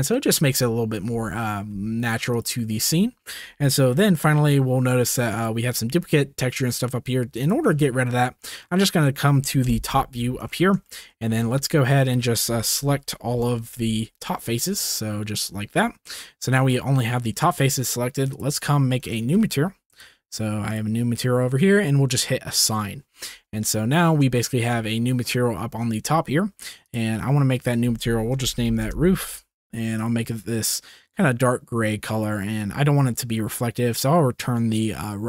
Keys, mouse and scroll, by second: 2.3 drag, 5.0 drag, 8.6 drag, 8.8-9.1 middle drag, 9.7 KP_7, 10.7-11.0 shift+middle drag, 11.3 Tab, 11.7 click, 12.6 KP_1, 13.3 KP_7, 14.1 click, 16.0 click, 20.6 click, 22.5 click, 23.4 Tab, 23.7 drag, 23.9 middle click, 24.5 shift+middle click, 26.9 click, 27.7 click, 28.0 shift+middle click, 28.4 click, 28.5 o, 33.8-35.2 middle drag.